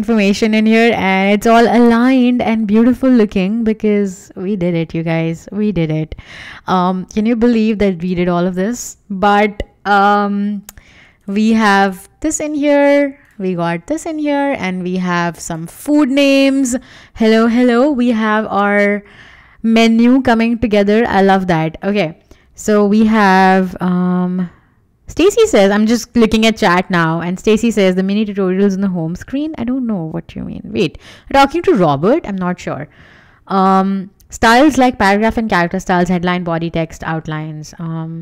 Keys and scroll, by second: 10.6 w, 15.9 Escape, 17.5 w.